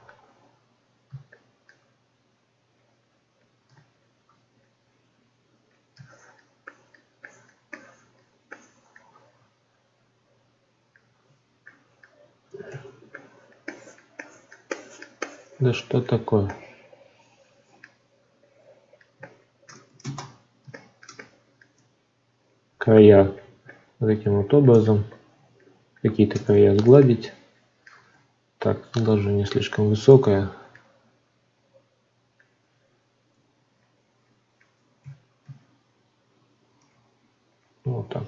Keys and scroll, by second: 12.6 ctrl+z, 20.0 ctrl+space, 28.1 ctrl+z, 35.0 ctrl+z.